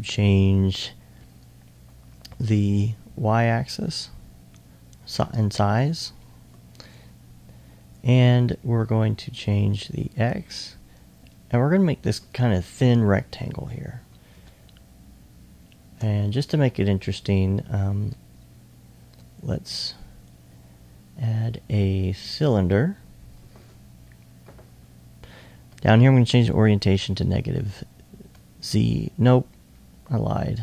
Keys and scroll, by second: 14.0 s.